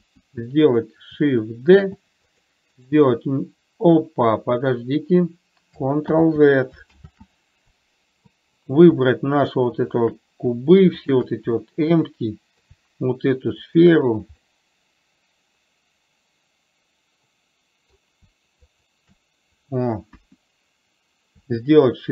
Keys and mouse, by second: 0.2 KP_1, 2.1 shift+d, 3.5-5.1 right drag, 6.5 ctrl+z, 10.2 click, 12.0-13.0 middle drag, 14.0 shift+click, 14.9-18.4 middle drag, 19.2 shift+click, 20.6 KP_1.